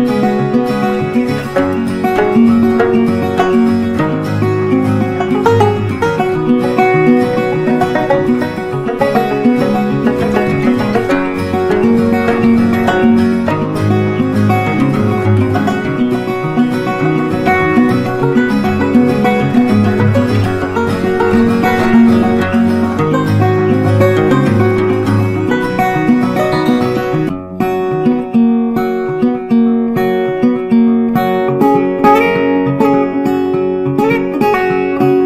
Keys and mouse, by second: 0.7-7.7 shift+drag, 9.6-18.2 drag, 20.1-21.9 drag, 21.9 ctrl+right click, 24.3 shift+click, 29.4 c, 30.7 click.